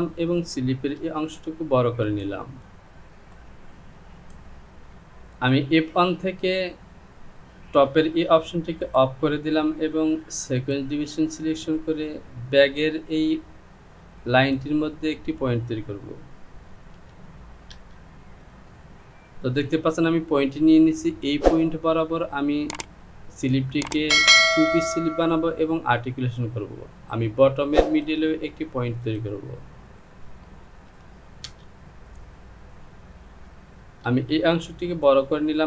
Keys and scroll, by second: 1.2 Return, 17.0 KP_2, 30.9 KP_2, 34.1 Return.